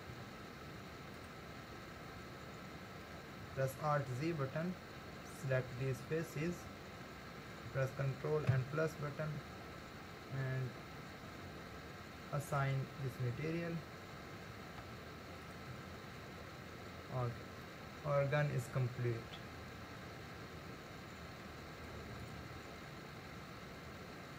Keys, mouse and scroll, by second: 0.1 Tab, 3.7 alt+z, 5.4 click, 6.9 scroll up 2, 8.5 ctrl+KP_Add, 9.5-10.3 scroll down 1, 10.3 scroll down 1, 11.0 scroll up 2, 12.5-13.9 drag, 13.9-14.8 scroll down 3, 14.8 Tab, 17.6-20.7 middle drag, 22.2 click.